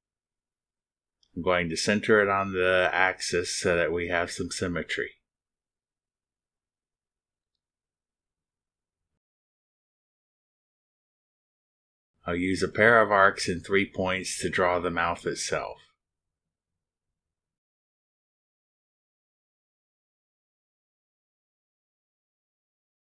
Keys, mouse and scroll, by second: 1.6 click, 4.0 click, 5.9 click, 7.2 ctrl+click, 8.3 ctrl+click, 10.7 click, 13.3 click, 14.5 click, 15.9 click, 17.7 click, 20.3 click, 22.3 click.